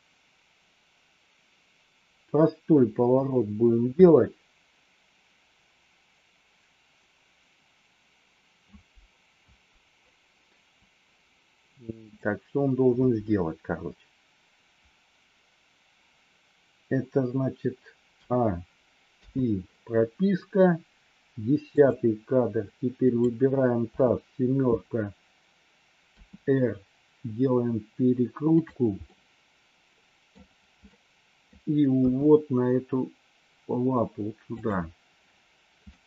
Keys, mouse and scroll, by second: 19.0 i, 21.8 click, 23.0 click, 23.8 KP_7, 26.2 r, 28.9-30.3 middle drag, 30.8 middle click, 31.9 g, 35.8 scroll up 1, 35.9 middle click.